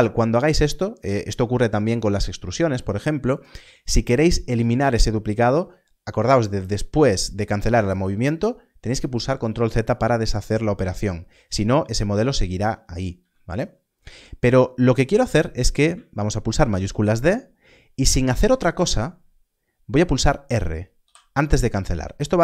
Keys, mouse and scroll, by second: 13.1 x, 16.5 shift+d.